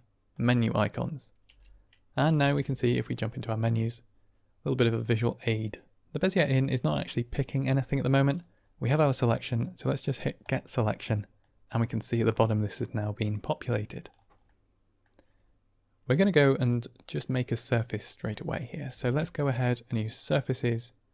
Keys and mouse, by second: 0.2 click, 1.4 n, 2.3 shift+a, 7.3 click, 10.3 click, 11.3-14.1 drag, 14.5 middle click, 16.1 middle click, 16.7-17.7 middle drag, 18.8 shift+a.